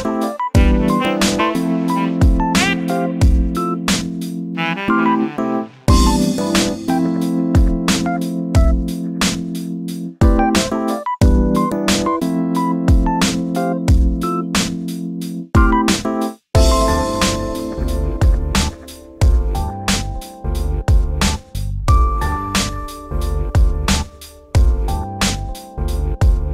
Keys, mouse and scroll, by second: 0.0 g, 2.7 shift+middle click, 2.9 scroll down 3, 3.1 middle click, 3.7 scroll down 1, 3.8 middle click, 4.6-5.2 scroll up 4, 4.6 middle click, 5.2-6.8 middle drag, 6.8 click, 7.1 shift+click, 7.6 shift+click, 7.9 shift+click, 8.3 shift+click, 8.8 scroll up 2, 9.0 scroll down 3, 9.2 shift+middle click, 9.5-10.0 scroll up 3, 10.0 shift+click, 10.3 shift+click, 10.6 shift+click, 10.9 shift+click, 11.2 shift+click, 12.2 s, 15.3-16.7 middle drag, 17.4 scroll up 2, 17.5 shift+middle click, 18.2 middle click, 18.7 click, 18.9 2, 19.3 click, 19.6 1, 19.8 click, 20.1 scroll up 2, 20.3-21.7 middle drag, 21.7 scroll down 2, 21.9 middle click, 22.5 scroll up 1, 22.7 click, 22.9-23.6 scroll down 5, 23.1 middle click, 23.6 shift+middle click, 24.2 scroll up 2, 24.4 shift+middle click, 24.8 2, 24.9 click, 25.4 shift+click, 25.8 shift+click, 26.4 ctrl+v.